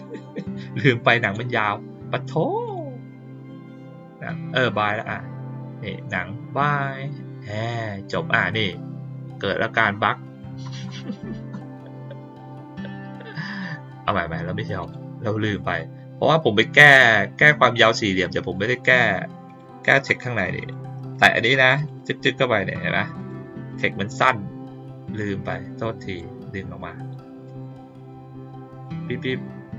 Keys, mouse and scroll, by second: 1.2 click, 2.6 click, 3.6 click, 4.7 click, 14.7 click, 18.2 click, 19.4 click, 20.5 click, 21.1 click, 21.7 click, 21.9 click, 23.1 click, 23.6 click, 25.1 click, 27.4 click, 28.6 click, 28.8 click.